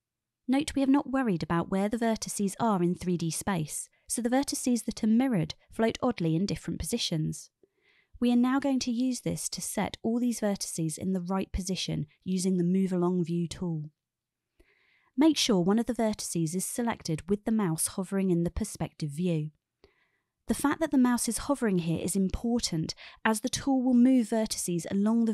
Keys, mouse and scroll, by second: 0.5 click, 1.2 e, 3.1 drag, 4.1 click, 5.2 e, 8.1 click, 10.0-11.9 shift+middle drag, 14.4 shift+middle click, 19.8 click.